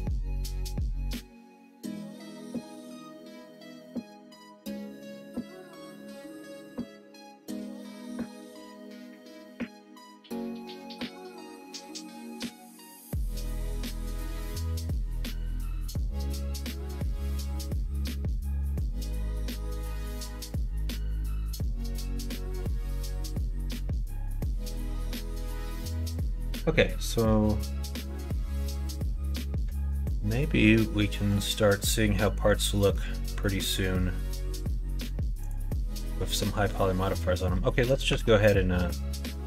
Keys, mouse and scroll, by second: 0.1 middle click, 0.4 Tab, 1.4 click, 3.2 shift+click, 3.7 shift+click, 4.3 shift+click, 5.4 shift+click, 5.8 shift+click, 12.0 middle click, 12.9 s, 14.1 ctrl+z, 14.9 ., 16.4-18.0 middle drag, 19.0 s, 21.1 Tab, 21.5 click, 21.9 middle click, 22.7 click, 23.5 middle click, 23.9 middle click, 24.6 middle click, 25.2 middle click, 28.6 middle click, 30.5 middle click, 31.1 middle click, 32.6 middle click, 33.4 middle click, 35.4 click, 36.7 click, 37.2 middle click, 37.6 middle click, 38.1 Tab, 38.8 middle click, 39.3 alt+z.